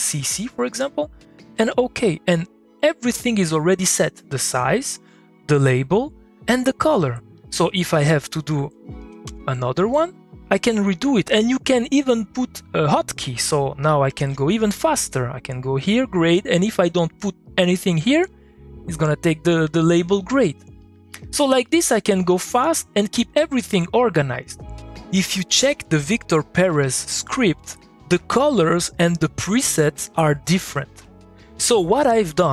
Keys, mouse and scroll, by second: 1.2 click, 2.2 middle click, 3.8 middle click, 6.9 middle click, 7.3 click, 8.6 g, 9.0 g, 9.3 g, 9.7 click, 10.1 middle click, 10.8 click, 11.5 middle click, 13.9 middle click, 14.1 ctrl+shift+a, 15.1 click, 18.2 click, 19.5 middle click, 20.4 click, 20.7 middle click, 20.8 click, 21.0 middle click, 21.5 middle click, 21.6 click, 21.9-22.8 middle drag, 22.8 alt+F1, 28.3-30.6 drag, 30.6-32.5 drag.